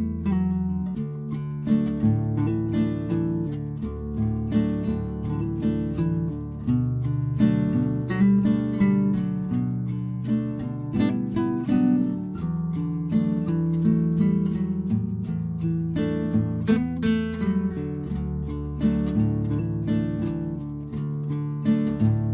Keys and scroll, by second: 1.5 Return.